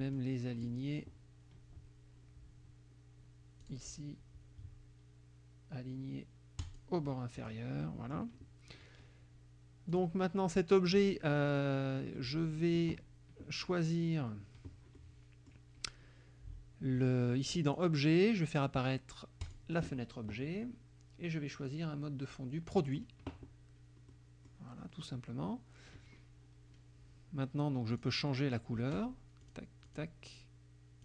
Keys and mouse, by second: 0.2 click, 3.7 click, 6.7 click, 7.4 click, 7.9 middle click, 10.0 click, 11.4 middle click, 12.2 middle click, 15.0 middle click, 17.7 click, 19.5 click, 21.7-23.1 drag, 24.2 middle click, 28.0 click, 29.5 click, 29.9 click.